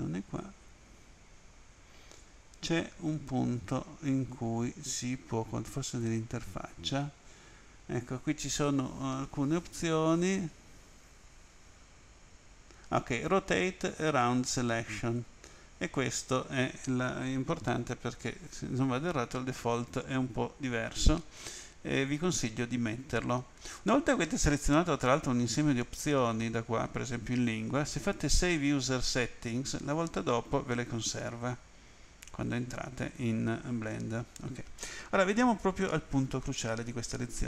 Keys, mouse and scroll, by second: 0.9-1.5 scroll up 2, 1.5-2.1 scroll up 8, 5.9 click, 33.0 click.